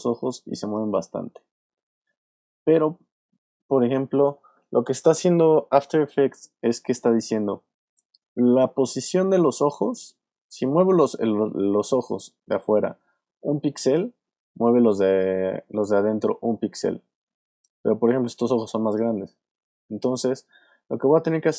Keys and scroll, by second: 1.1 super+z, 2.4 super+z, 7.8 super+z.